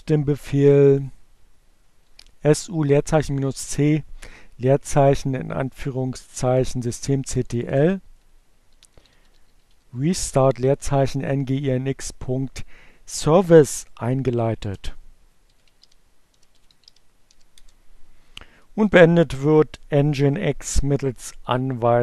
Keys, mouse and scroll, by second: 1.0 click, 1.4 Up, 3.2 Left, 5.6 BackSpace, 6.6 BackSpace, 7.8-9.9 typing, 13.2 Return, 13.9-15.8 typing, 15.9 Return, 18.7 Up, 19.8 Left.